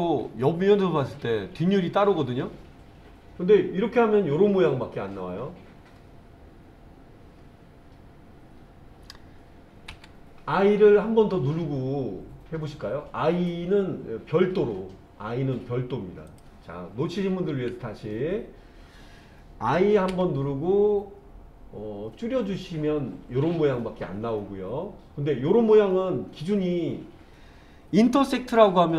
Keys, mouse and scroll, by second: 9.9 i, 16.3 click, 17.5 ctrl+z, 20.1 i.